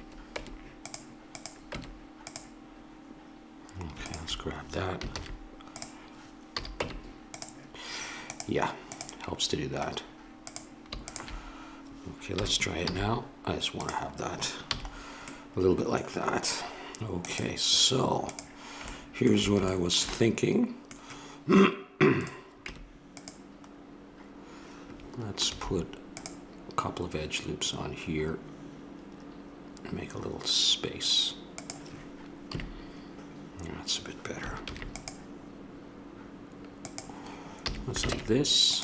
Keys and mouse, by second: 0.3 Tab, 1.3 click, 1.8 Tab, 5.1 shift+s, 6.5 a, 6.8 Tab, 10.6-12.8 drag, 12.3 r, 14.6 a, 17.1-18.8 drag, 18.8-22.1 middle drag, 22.1-22.6 drag, 22.6 Tab, 25.4 ctrl+r, 32.5 KP_3, 34.6 ctrl+r, 37.6 a, 38.1 ctrl+Tab.